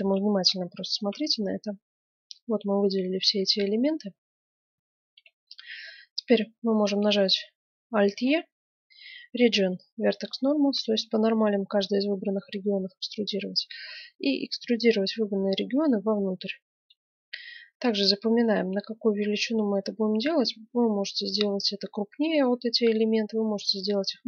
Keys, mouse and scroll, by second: 0.0 click, 0.9-2.5 right drag, 3.0-4.6 middle drag, 4.8-8.1 middle drag, 8.1 alt+e.